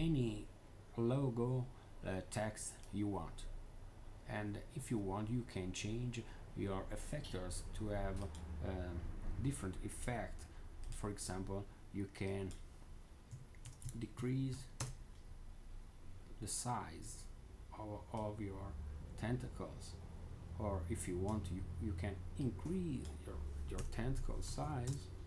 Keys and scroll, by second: 12.9-14.9 typing, 23.4-25.0 typing.